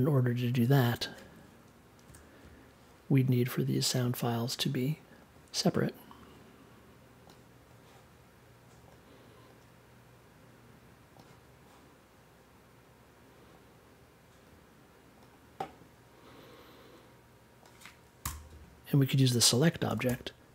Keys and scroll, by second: 2.0 BackSpace, 18.2 BackSpace, 19.6-20.5 typing.